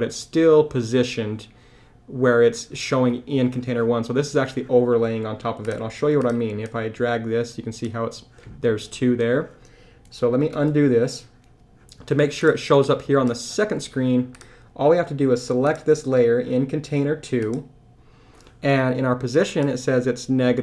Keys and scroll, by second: 10.5 super+z.